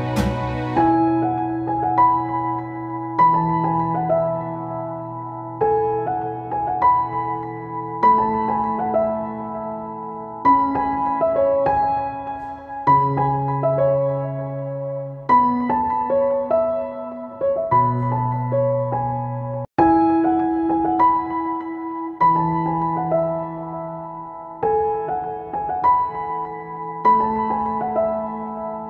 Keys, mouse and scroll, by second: 6.0 click, 9.2 click, 11.3 right click, 12.2 click, 13.0-17.6 shift+drag, 20.5 right click, 21.1 click, 22.7 Return, 24.2-27.9 drag.